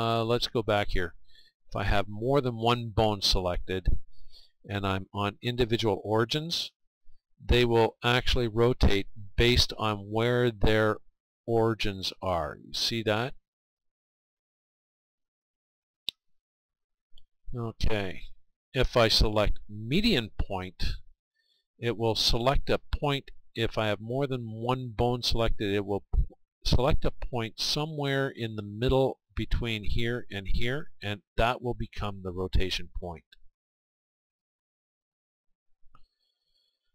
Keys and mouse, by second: 2.2-4.0 right drag, 16.7-18.6 right drag, 18.1-35.3 drag, 35.3-36.9 right drag.